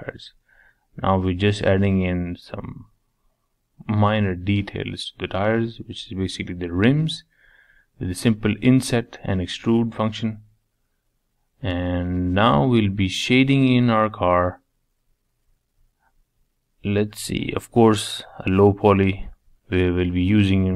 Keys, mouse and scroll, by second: 1.3-3.2 middle drag, 3.2 Tab, 3.5-4.6 middle drag, 4.6 scroll down 1, 4.8 middle click, 5.5 click, 5.8-7.7 middle drag, 10.5-11.9 middle drag, 11.9 click, 12.4 click, 12.7 middle click, 13.5-14.1 scroll up 1, 14.1-15.0 scroll up 1, 15.0 click, 15.7 middle click, 16.6-20.4 drag.